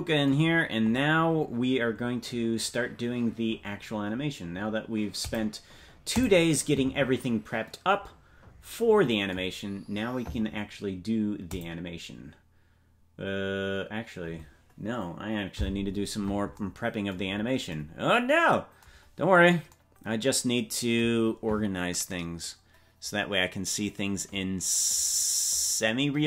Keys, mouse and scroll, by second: 0.5-2.5 scroll down 4, 5.2-11.1 drag, 5.2-6.1 scroll down 8, 13.9-16.5 drag, 17.3-17.7 scroll up 4.